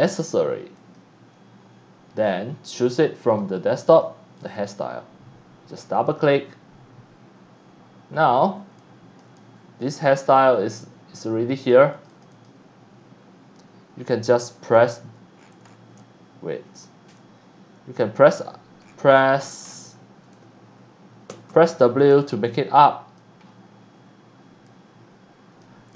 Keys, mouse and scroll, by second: 0.8 click, 2.0 scroll up 1, 3.3 click, 3.9 click, 4.4 click, 4.6 click, 8.2 scroll up 1, 8.7 x, 8.8 click, 9.3 c, 9.3 click, 10.0-10.8 scroll up 3, 11.1 x, 11.2 click, 11.9 click, 12.1 click, 12.3 click, 14.7 g, 15.4-15.8 scroll down 2, 16.0 c, 16.0 click, 17.2-17.9 drag, 18.3 e, 18.8-19.8 scroll down 4, 20.0 e, 20.4 a, 21.3 a, 21.7 a, 22.3 click, 23.4 scroll up 1, 24.7 click, 25.9 click.